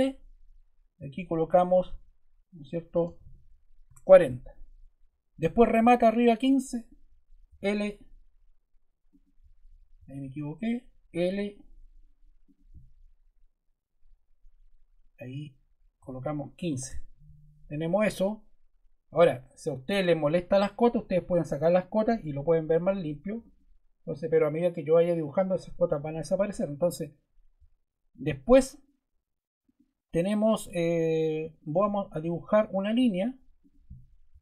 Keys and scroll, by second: 2.7-3.7 typing, 3.8 Return, 7.5 l, 9.9 Escape, 11.2 l, 15.9 1, 16.5 5, 16.7 Return.